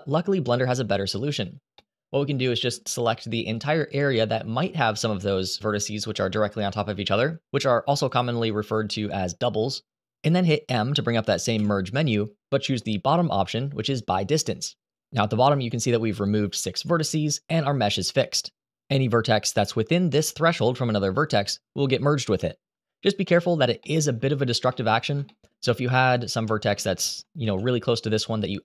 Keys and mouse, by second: 1.5 middle click, 2.2 shift+middle click, 3.3 click, 11.3 m, 24.4 Delete, 24.4 middle click, 25.0 shift+middle click, 26.2 shift+middle click, 27.1 shift+d, 27.9 click.